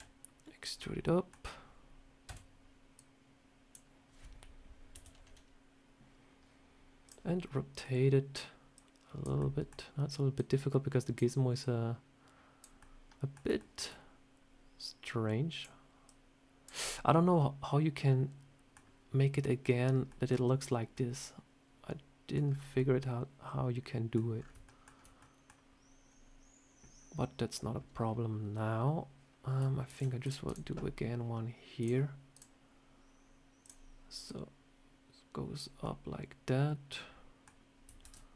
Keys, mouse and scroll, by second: 0.7 middle click, 2.2 a, 2.8 click, 4.8 KP_7, 6.2 scroll down 1, 6.9 click, 7.7 middle click, 8.6 click, 9.3 middle click, 10.2 click, 11.5 click, 12.7 middle click, 13.5 shift+middle click, 14.9 click, 15.9 click, 16.7 middle click, 20.0 middle click, 20.8 middle click, 22.3 scroll down 4, 22.7 middle click, 24.3 scroll up 3, 24.6 shift+middle click, 25.1 middle click, 26.0 scroll up 1, 26.9 scroll up 1, 29.8 ctrl+r, 31.7 click, 32.2 click, 33.5 click, 34.1 click, 35.7 middle click, 37.9 ctrl+r.